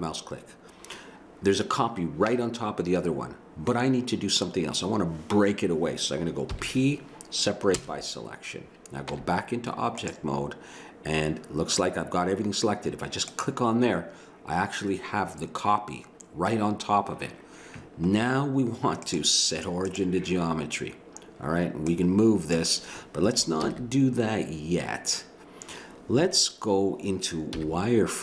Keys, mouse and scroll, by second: 6.5 p, 9.2 Tab, 13.2 click, 23.4 click, 23.6 ctrl+z, 27.6 z.